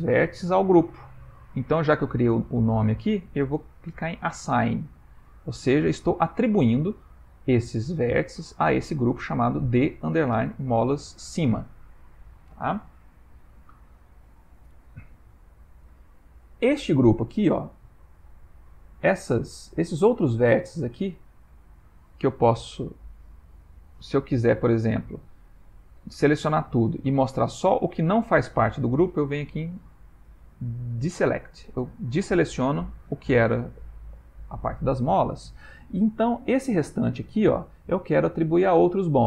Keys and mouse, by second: 5.5 click, 12.3 ctrl+middle click, 15.9 ctrl+middle click, 18.3 a, 19.5-21.2 typing, 23.1 click, 24.5 a, 24.9 a, 25.2 a, 26.2 a, 31.0 click.